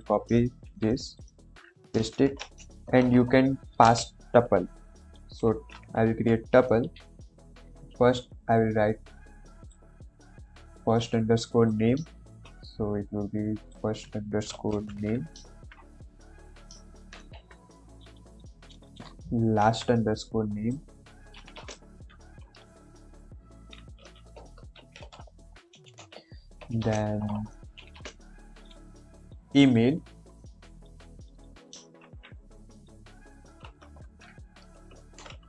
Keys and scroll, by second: 0.6 ctrl+c, 1.3 ctrl+v, 1.9-3.8 typing, 5.1 shift+9, 6.0 Left, 6.8 shift+', 12.2 ctrl+c, 14.6 ctrl+Left, 14.9 ctrl+v, 15.4 ctrl+s, 19.5 ctrl+c, 21.5 ,, 21.5 space, 21.8 ctrl+v, 22.9 shift+Left, 24.7 shift+', 25.3 End, 25.9 Left, 26.5-27.9 typing, 31.9 ctrl+c, 33.7 Right, 33.9 ctrl+v, 34.9 shift+Left.